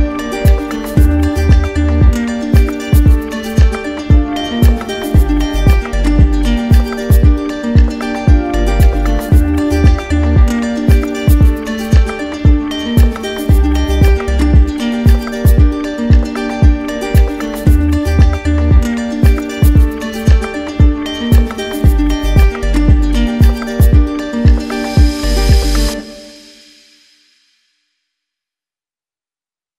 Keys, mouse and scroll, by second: 0.1 click, 1.9-2.9 drag, 4.4-5.5 drag, 6.1-7.1 drag, 7.2-8.3 drag, 9.2 ctrl+d, 19.7 ctrl+z, 21.1 click, 21.5 ctrl+z, 22.4 click, 23.5 click, 26.8 click, 28.9 click.